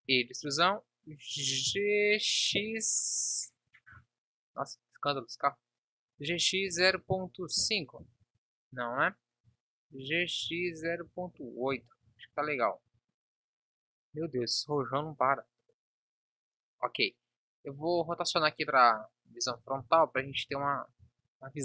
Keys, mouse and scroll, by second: 0.0 a, 0.0 e, 9.2 ctrl+z, 10.0 g, 12.9 Tab, 15.9 KP_1, 19.4 r, 21.0 Tab.